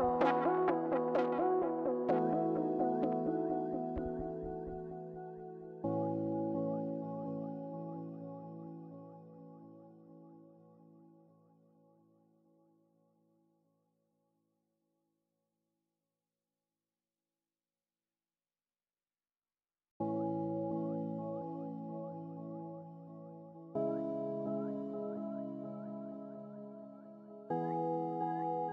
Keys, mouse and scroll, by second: 1.5 scroll up 1, 1.6 middle click, 2.3 scroll up 1, 2.7 scroll down 1, 2.9 middle click, 3.5 middle click, 3.7 scroll down 1, 3.8 middle click, 6.1 scroll down 1, 11.7 scroll down 1, 11.7 middle click, 15.0 middle click, 24.5 scroll up 1, 24.7 middle click, 25.6 scroll down 1, 25.8 middle click.